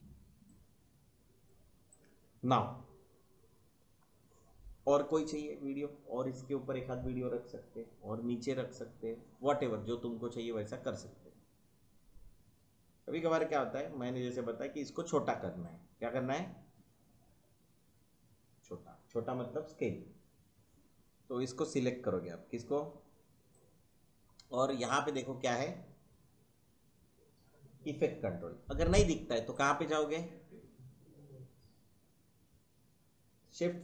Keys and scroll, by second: 0.0 space, 29.6 shift+2.